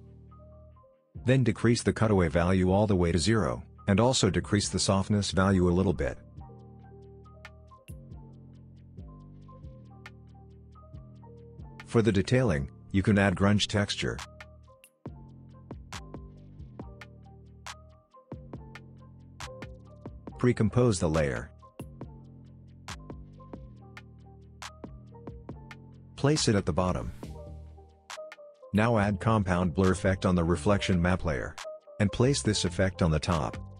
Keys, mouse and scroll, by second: 1.9-3.0 drag, 6.3-7.8 scroll up 1, 7.8-11.3 drag, 11.6 alt+scroll down 1, 12.4 click, 13.5-16.2 drag, 19.9 right click, 20.5 click, 23.0 BackSpace, 25.4-27.2 drag, 29.3 ctrl+space, 29.9-31.1 typing, 31.4 Down, 31.7 Return, 33.4-33.7 drag.